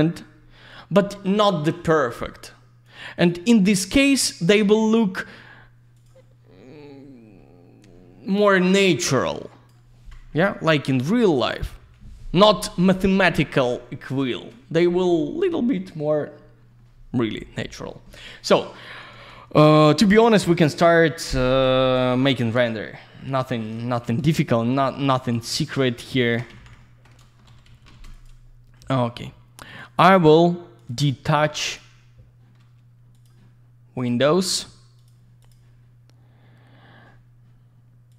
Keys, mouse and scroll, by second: 0.3 scroll down 1, 1.0 middle click, 2.8 click, 4.2 scroll down 1, 4.6 middle click, 5.2-5.6 scroll up 1, 5.6-5.9 scroll down 1, 5.9 click, 6.0 click, 9.2 click, 10.0-10.4 scroll down 1, 11.8 Delete, 14.8 middle click, 15.7-16.2 scroll up 1, 19.1 alt+w, 20.0 alt+w, 21.2 middle click, 21.3 middle click, 23.9 F3, 24.3 alt+middle click, 24.7 alt+z, 24.9 click, 25.3 q, 25.7 click, 25.8 click, 26.2 ctrl+click, 26.3 ctrl+click, 26.8 alt+middle click, 27.5 ctrl+shift+g, 28.1 click, 28.2 click, 28.7 middle click, 29.7 click, 29.8 click, 30.8 click, 30.9 click, 31.1 alt+middle click, 31.6 click, 31.7 click, 33.1 click, 33.2 click, 34.0 click, 34.1 click, 35.0 click, 35.0 click, 35.4 click, 35.5 click, 38.1 click.